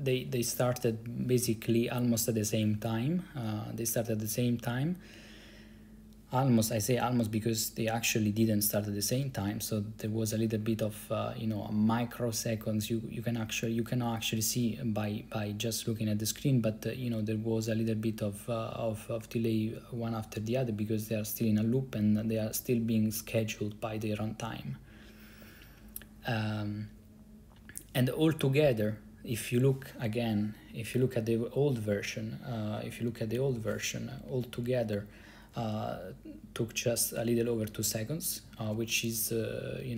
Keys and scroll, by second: 33.3 ctrl+b, 33.6 [, 34.2 Up, 34.4 Up, 34.5 Up, 34.7 Up, 34.8 Up, 35.2 Up, 35.3 Up, 35.4 Up, 35.5 Up, 35.6 Up, 35.7 Up, 37.7 Up, 38.3 Up, 38.8 Up, 39.3-39.9 Up.